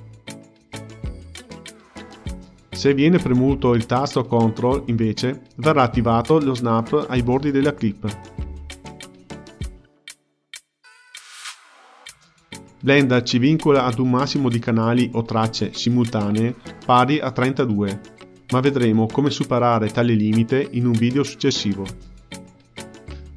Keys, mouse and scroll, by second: 0.3-1.8 scroll up 17, 3.1-6.2 drag, 7.0-12.4 drag, 12.8-15.3 typing, 13.0 click, 14.1 middle click, 14.3 shift+click, 14.5 middle click, 14.9 ctrl+middle click, 15.1 click, 15.6 scroll up 5, 15.8 middle click, 16.3 click, 16.3 shift+d, 16.6-18.5 middle drag, 18.5 click, 19.7 shift+d, 23.1 click.